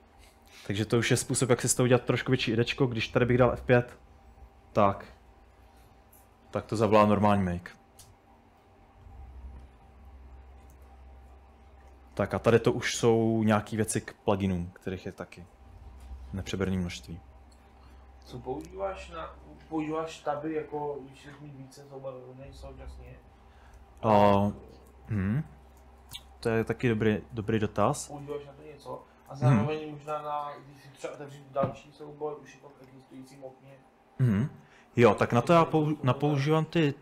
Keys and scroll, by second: 3.6 F5, 8.1 Return, 9.8-14.4 typing, 10.9 Escape, 11.1 Escape, 16.0-16.8 typing, 27.4-29.5 typing.